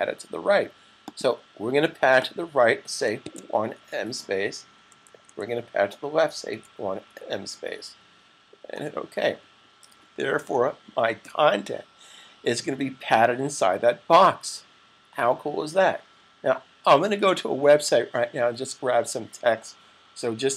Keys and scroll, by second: 3.0-3.9 typing, 6.3-7.1 typing, 10.2 s.